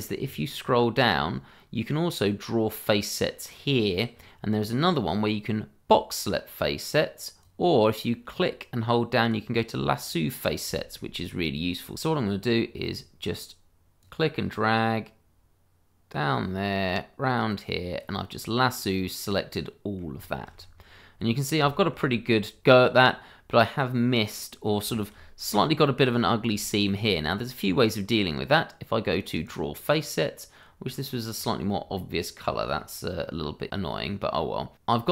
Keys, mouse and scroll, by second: 0.5-2.8 scroll down 1, 4.2-5.6 scroll down 1, 7.4 click, 9.7-10.4 scroll down 1, 10.7 shift+middle click, 11.8 scroll up 1, 11.9 shift+middle click, 12.3-14.0 scroll down 1, 14.0 click, 18.6 middle click, 20.3 shift+middle click, 20.5-21.2 scroll up 1, 21.2 middle click, 21.9 shift+middle click, 22.0-23.0 scroll up 1, 23.0 middle click, 24.0-24.3 scroll down 1, 24.3 middle click, 24.9 shift+middle click, 26.1-26.5 scroll up 1, 26.7 shift+middle click, 26.8 middle click, 26.8 shift+middle click, 28.4-29.4 scroll up 1, 29.4 click, 30.0 scroll up 1, 30.9-31.3 scroll down 1, 32.4-32.8 scroll up 1.